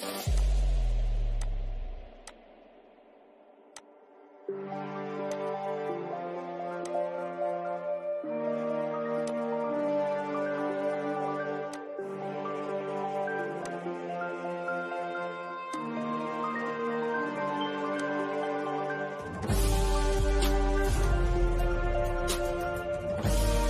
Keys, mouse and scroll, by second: 3.3 g, 4.2 click, 8.1 click, 10.7 click, 13.5 shift+middle click, 14.7 click, 15.1 middle click, 16.3-16.9 shift+scroll down 1, 16.9 click, 19.9 click, 20.4 scroll down 1, 21.3-23.5 shift+middle drag, 23.5 click.